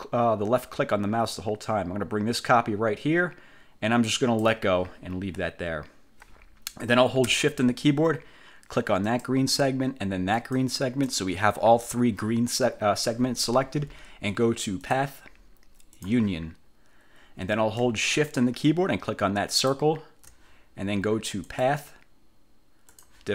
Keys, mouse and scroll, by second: 5.2 scroll down 2, 9.2 shift+click, 10.5 shift+click, 15.0 click, 16.1 click, 19.6 shift+click, 21.6 click, 23.0 click.